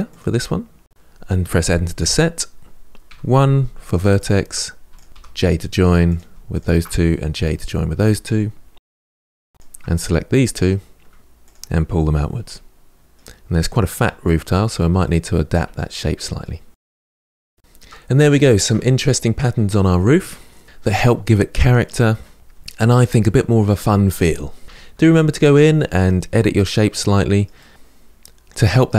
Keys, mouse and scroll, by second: 2.9 1, 3.9 click, 4.7 shift+click, 5.9 j, 6.6 click, 6.9 shift+click, 7.6 j, 8.7 2, 9.0 click, 9.3 shift+click, 9.6 middle click, 10.0 g, 10.5 r, 10.9 Tab, 11.0 scroll down 3, 11.1 middle click, 11.9 scroll up 1, 12.1 middle click, 12.2 Tab, 12.3 middle click, 12.5 click, 12.8 g, 13.1 click, 13.5 g, 13.7 Tab, 13.8 middle click, 14.3 Tab, 14.3 middle click, 14.5 click, 14.7 middle click, 14.8 g, 15.4 middle click, 15.6 click, 15.7 middle click, 15.8 g, 16.0 middle click, 16.2 click, 16.4 g, 16.7 Tab, 16.7 scroll down 7, 16.9-17.9 middle drag, 18.3-20.6 shift+middle drag, 24.6 Tab, 24.7 shift+middle click, 24.8 scroll up 3, 24.9 middle click, 25.0 click, 25.2 r, 25.3 g, 25.3 middle click, 25.6 middle click, 25.8 click, 26.0 middle click, 26.6 middle click, 26.8 r, 26.9 middle click, 27.0 click, 27.3 shift+middle click, 27.5 click, 27.9 scroll down 2, 28.0 middle click, 28.3 click, 28.5 r, 28.6 middle click, 28.8 click, 28.9 Tab, 28.9 scroll down 1.